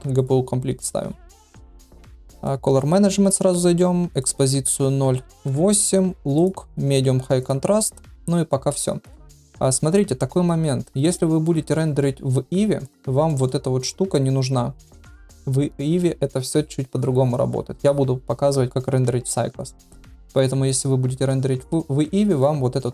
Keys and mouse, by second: 2.3 click, 4.1-5.8 drag, 6.5-7.5 drag, 9.3 ctrl+s, 11.1-11.4 middle drag, 11.7 shift+drag, 13.2 middle drag, 19.6-19.9 middle drag.